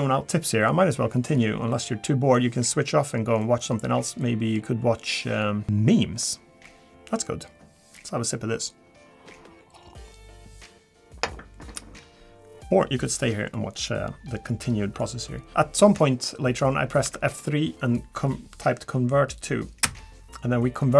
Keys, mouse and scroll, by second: 1.7 middle click, 3.0-3.4 scroll down 2, 3.4 middle click, 3.8 scroll up 1, 4.2 middle click, 4.8-5.3 scroll up 2, 13.2-13.5 scroll down 2, 13.5 middle click, 14.0-14.3 scroll up 2, 14.6 middle click, 15.1 scroll up 2, 15.5 Tab, 15.5 shift+middle click, 15.5 scroll down 1, 15.8 middle click, 16.3 scroll down 1, 17.0 F3.